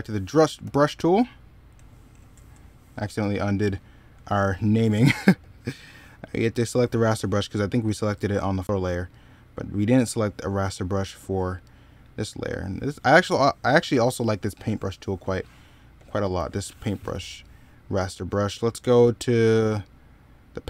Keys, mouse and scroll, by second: 0.4 b, 3.0 ctrl+z, 3.6 middle click, 15.8 ctrl+z.